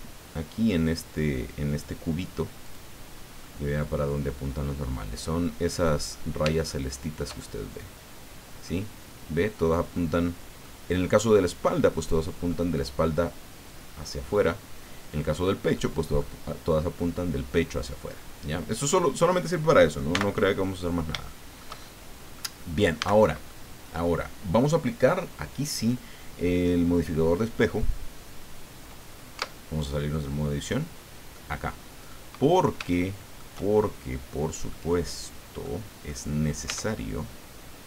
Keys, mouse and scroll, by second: 2.6 click, 3.4-6.0 drag, 6.1 scroll up 1, 6.6 shift+click, 7.7-8.8 drag, 9.9 click, 11.4-12.6 drag, 14.3-15.5 drag, 15.7 click, 18.7 click, 20.1 n, 20.6 click, 21.3 shift+click, 21.9 shift+click, 23.0 a, 23.5-24.9 drag, 29.3 Tab, 30.6 click, 31.3 click, 31.4 middle click, 32.5 scroll down 1, 32.9 shift+middle click, 33.7-34.8 shift+drag, 35.0 click, 36.0 click, 36.6 Tab.